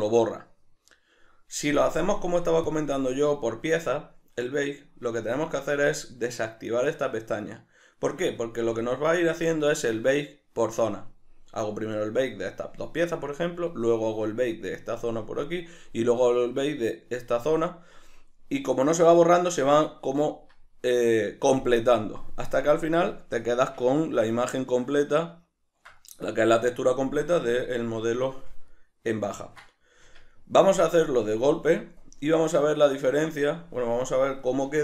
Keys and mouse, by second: 1.8 click, 2.7 click, 3.3 right click, 8.6 a, 23.2-34.8 ctrl+middle drag, 30.0 Tab.